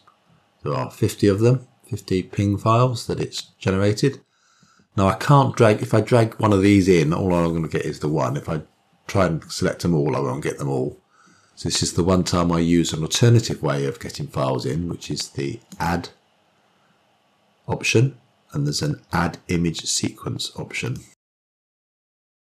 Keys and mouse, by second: 16.8-22.5 drag.